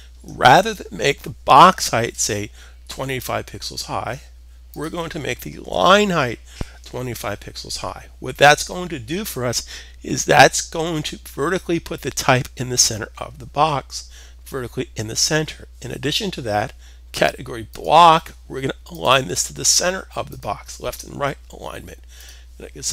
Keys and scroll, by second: 5.3-6.1 typing.